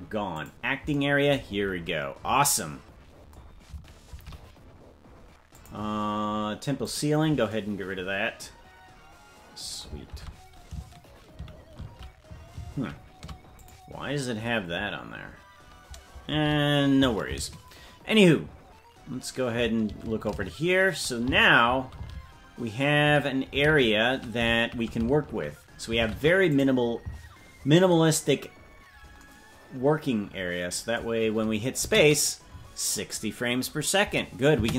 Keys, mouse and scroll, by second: 1.5-2.0 scroll down 10, 4.1 shift+`, 6.8-8.2 drag, 10.1 shift+`, 31.8 space.